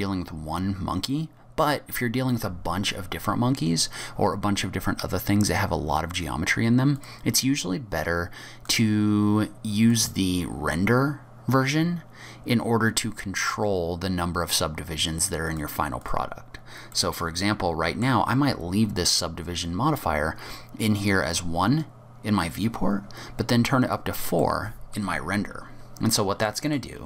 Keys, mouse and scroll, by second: 2.3-3.0 scroll down 4, 3.0-5.3 scroll up 3, 7.0 click, 8.7 click, 15.5 click, 16.9 click, 16.9 middle click, 18.9-20.1 scroll up 6, 20.1-21.3 scroll down 4, 22.8-24.4 scroll down 1, 24.4 middle click, 25.1 scroll down 2, 25.7 scroll up 5, 26.2-26.5 scroll down 3, 26.5 middle click.